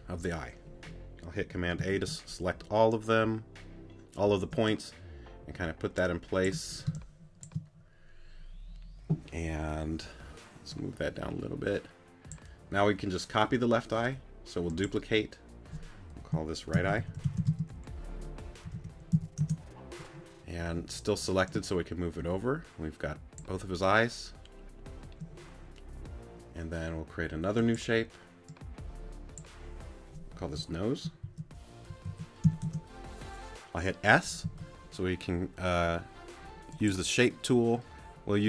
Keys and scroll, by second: 18.6 e, 34.4 s.